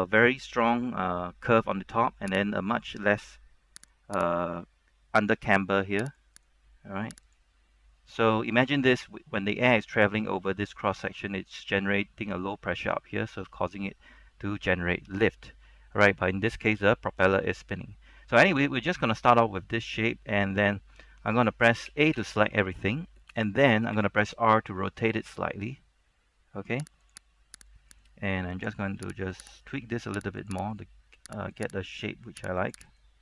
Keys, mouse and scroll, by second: 2.7 right click, 4.0 click, 4.3 right click, 6.2 click, 6.5 right click, 7.4 click, 8.1 scroll down 1, 8.3 scroll up 1, 14.5-15.1 scroll down 1, 15.1-15.6 scroll up 1, 15.6-18.0 scroll down 1, 18.0-22.0 scroll up 1, 22.0 a, 22.3 a, 24.1 r, 27.1 click, 27.7 right click, 29.1 g, 29.5 click, 29.7 right click, 30.0 g, 30.6 click, 30.9 right click, 31.1 g, 31.6 click, 32.1 right click, 32.4 g, 32.7 click, 33.0 right click.